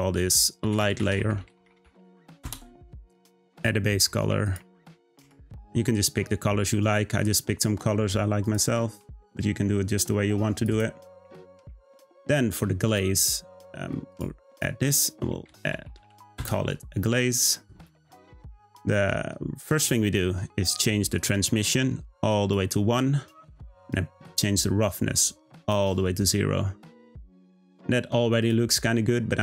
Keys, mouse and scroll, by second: 3.5 click, 12.8 click, 14.1-17.5 drag, 19.2-21.2 scroll down 5, 21.2-24.2 drag, 24.2-27.2 drag, 27.6 click, 28.4 click.